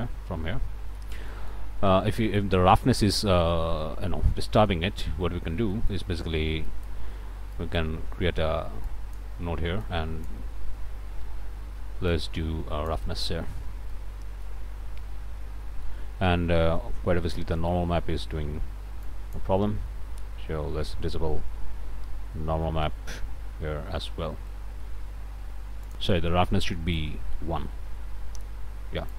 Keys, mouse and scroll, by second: 1.2 scroll up 1, 1.3 middle click, 2.4-3.8 middle drag, 3.9-4.9 middle drag, 5.1-5.6 scroll up 1, 5.7 middle click, 5.8-6.1 scroll up 2, 8.9-10.5 drag, 11.6 Escape, 12.1-13.1 drag, 13.9-17.2 drag, 17.7 shift+right click, 19.1 click, 22.9-24.2 middle drag, 24.5 middle click, 25.9 click, 27.0-29.1 drag.